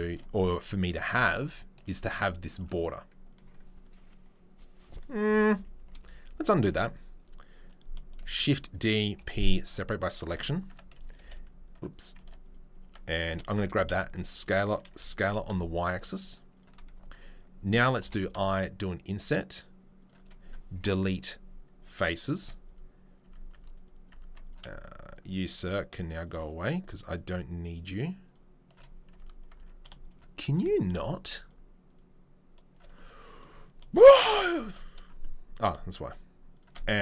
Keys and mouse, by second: 1.4 alt+click, 5.8 ctrl+z, 6.3 ctrl+z, 6.6 ctrl+z, 8.2 shift+d, 9.2-30.0 middle drag, 9.2 p, 10.2 Tab, 10.7 Tab, 10.9 a, 11.2 s, 12.2 Tab, 12.8 Tab, 13.2 a, 13.5 s, 14.8 s, 20.8 Delete, 22.4 Tab, 23.2 Tab, 24.1 Tab, 24.4 click, 24.7 shift+right click, 25.6 shift+right click, 26.8 shift+right click, 29.5 Tab, 30.0 shift+right click, 30.5-36.5 middle drag, 36.5 shift+right click, 36.6-37.0 shift+middle drag.